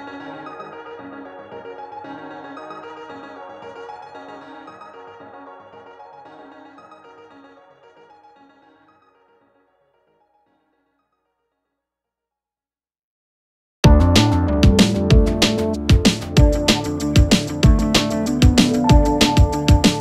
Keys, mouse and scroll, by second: 0.8-1.2 alt+scroll down 1, 2.6-3.2 alt+click, 6.2-9.6 drag, 12.4-12.7 alt+scroll down 2, 12.9-13.3 alt+scroll up 1, 13.4 space, 13.5-14.1 click, 13.8 space, 14.6-15.4 scroll up 2, 15.4 click, 17.2 click, 17.8 shift+click, 18.6 click.